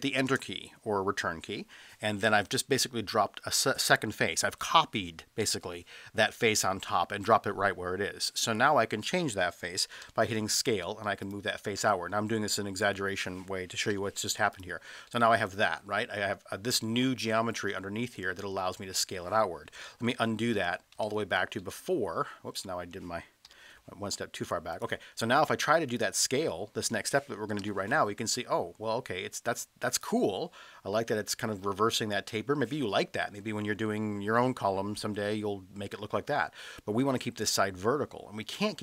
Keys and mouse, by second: 0.3 Return, 10.0 s, 11.2 click, 11.6-13.1 middle drag, 13.9 e, 14.5 click, 15.1-16.0 middle drag, 19.8 ctrl+z, 20.1 ctrl+z, 20.5 ctrl+z, 21.0 ctrl+z, 21.6-22.1 middle drag, 22.7 middle drag, 23.4 e, 24.7 click, 27.6 s, 29.9 click, 30.2-30.8 middle drag, 33.2 middle click, 35.0-35.9 middle drag.